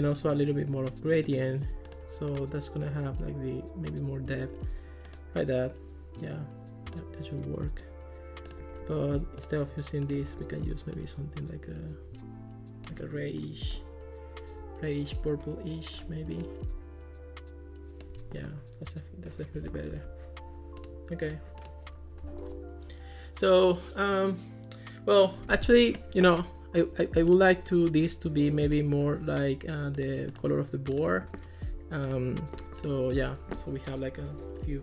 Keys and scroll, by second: 19.6 Escape.